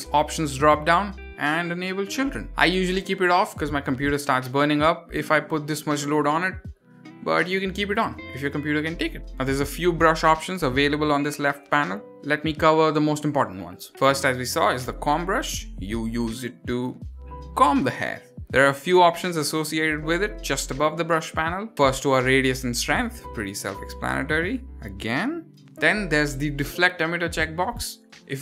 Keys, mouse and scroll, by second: 0.9-4.6 drag, 5.0-5.4 middle drag, 5.6 click, 6.3 click, 6.9 click, 7.4 click, 8.0 click, 8.5 click, 8.9 click, 14.1 click, 15.4 f, 16.2 click, 16.7 click, 17.1 click, 17.5 click, 17.9 click, 21.9 click, 23.6 click, 24.5 click, 25.2 drag, 27.8 click.